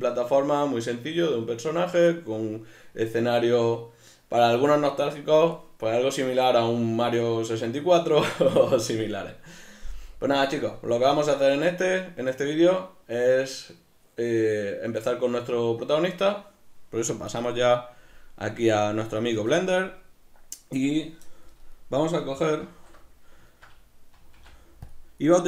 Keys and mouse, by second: 21.8-25.4 middle drag, 22.6 alt+q, 24.4 x.